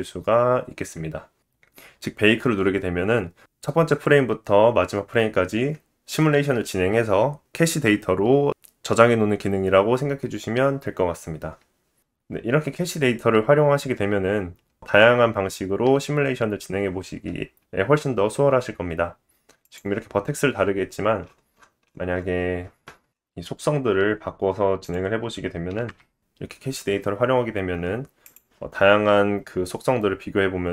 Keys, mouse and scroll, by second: 6.2 space, 16.1 space, 17.1 click, 18.0-18.9 scroll up 8, 18.9-20.5 scroll down 4, 20.5 click, 21.2 click, 22.9 KP_0, 23.7-24.6 scroll up 4, 24.6-24.9 scroll up 3, 25.1 click, 27.8 click, 28.4-29.8 scroll down 8, 29.8 click.